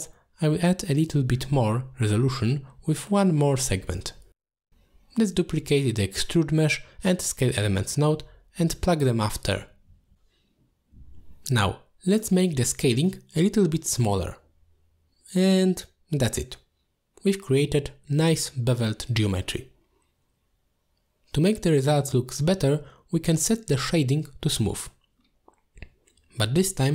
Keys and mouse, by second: 1.1 middle click, 1.9 click, 2.7-3.1 middle drag, 4.2 middle click, 4.7 middle click, 5.5 click, 6.0 shift+click, 6.6 shift+d, 8.5-9.2 drag, 9.9 click, 10.1-11.6 drag, 12.1 click, 13.0 click, 15.3 alt+shift+click, 17.3 middle click, 18.2-19.4 drag, 20.1 middle click, 22.0-24.7 drag, 25.7 middle click, 26.2 click, 26.4 click.